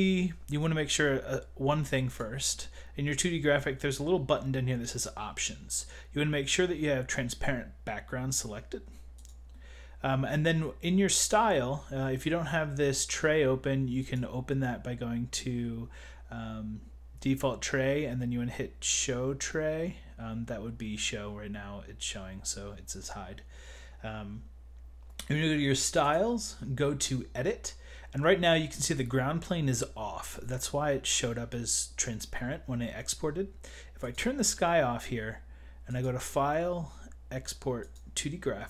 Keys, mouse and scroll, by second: 2.1 click, 2.2 click, 4.9 click, 9.3 click, 11.2 click, 14.0 click, 14.0 click, 26.1 click, 34.1 click, 35.9 click.